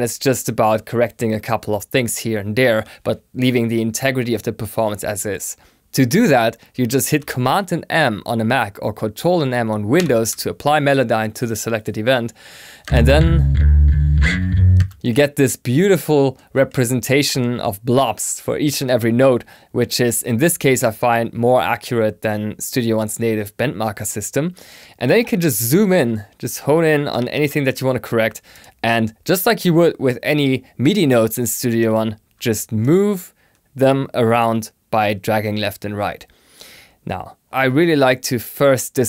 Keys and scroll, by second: 9.9 super+m.